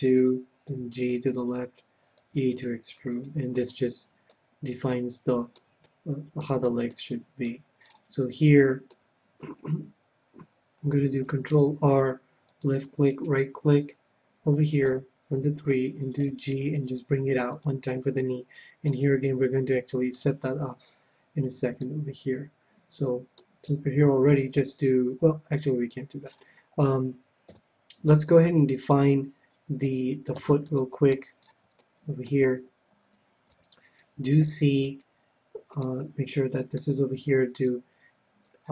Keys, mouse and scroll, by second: 0.3-3.1 drag, 0.5 s, 0.7 g, 2.2 e, 3.3-5.0 drag, 3.5-10.2 middle drag, 7.4 KP_1, 11.5 ctrl+r, 13.2-14.9 right drag, 14.8 KP_3, 16.2 g, 17.6-19.2 drag, 18.8-20.4 middle drag, 20.2 KP_1, 20.7-23.4 middle drag, 26.2-29.8 middle drag, 27.4-30.3 typing, 30.7-33.5 middle drag, 33.5 c, 34.8-36.6 right drag, 35.7-37.5 middle drag, 36.8 KP_3, 38.6-38.7 middle drag.